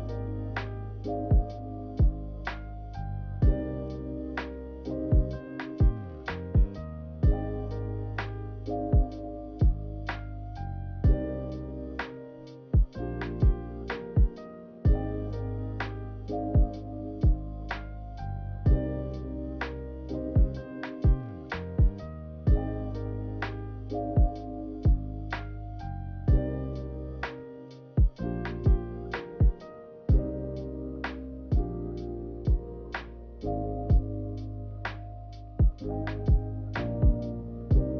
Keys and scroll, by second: 13.2 z, 34.9-36.9 typing.